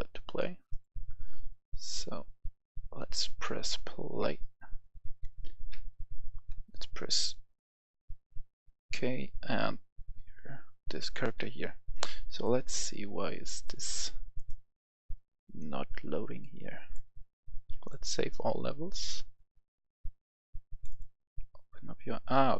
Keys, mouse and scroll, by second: 4.1-6.3 typing, 11.5 Escape, 12.3 click.